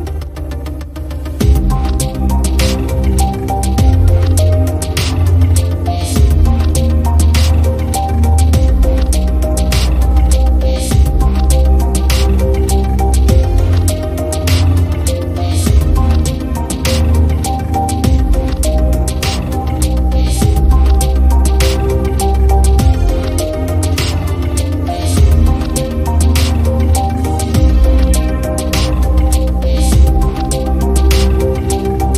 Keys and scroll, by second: 6.7 super+z, 13.1 i, 14.7 v, 16.0 i.